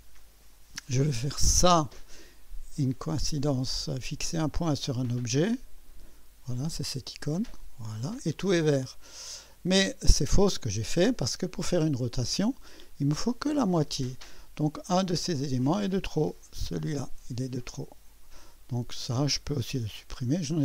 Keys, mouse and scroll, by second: 0.2 click, 1.5 click, 2.8 click, 4.7 click, 5.8 click, 7.2 click, 9.1-10.0 scroll up 1, 15.7 click, 16.5 Delete, 19.2 click, 20.0 Delete.